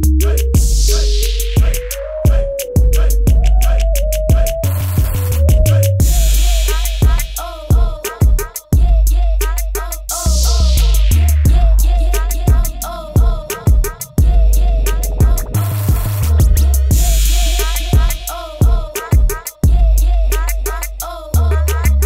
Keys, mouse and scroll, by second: 18.9 alt+click, 20.4 click.